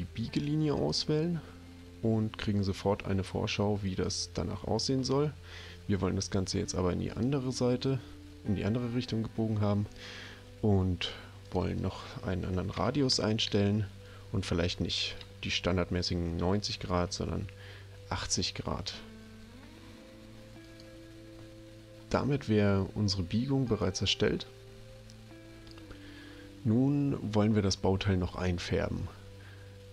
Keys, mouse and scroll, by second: 0.8 click, 3.8 click, 7.1 click, 12.7 BackSpace, 12.8 5, 13.4 Tab, 16.8 BackSpace, 17.0 8, 20.7 click, 23.7 click.